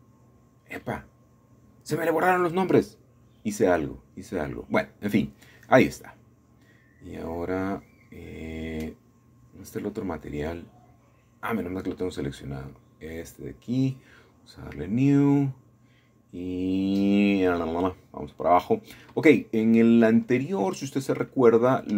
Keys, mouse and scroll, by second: 0.0 click, 1.7-2.8 scroll down 1, 3.2 scroll down 2, 3.6 scroll up 1, 3.7 scroll down 1, 3.8-4.2 scroll up 3, 5.8 click, 8.6 shift+middle click, 9.2 click, 10.5 Tab, 12.7-13.9 scroll up 1, 13.9 click, 15.0 click, 18.9-20.3 scroll down 4, 21.3-21.7 scroll up 2, 21.7 scroll down 1, 21.7-21.9 scroll up 2.